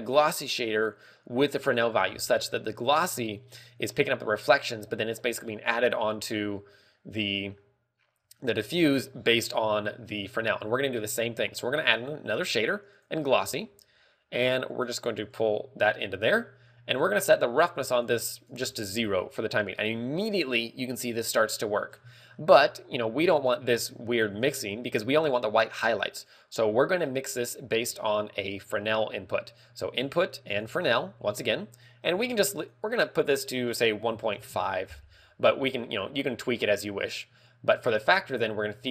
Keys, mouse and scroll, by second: 18.9 ctrl+click, 22.4 scroll, 34.9 click.